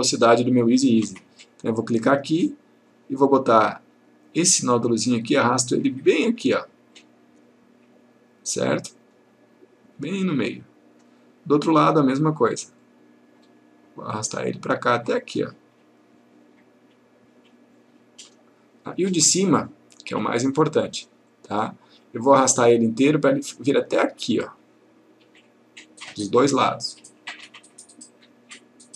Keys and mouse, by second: 1.8 click, 5.1-11.3 click, 12.9 click, 21.4 click, 26.6-28.9 click.